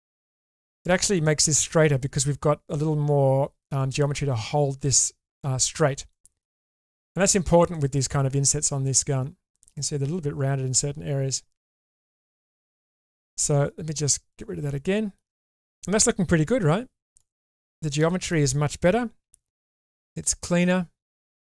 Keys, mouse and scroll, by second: 0.5 click, 0.8 middle click, 6.1 middle click, 7.8 shift+middle click, 8.8 middle click, 11.6 shift+middle click, 12.5 Tab, 14.3 click, 14.8 middle click, 15.4 click, 15.7 middle click, 16.6 1, 17.9 shift+middle click, 19.2 g.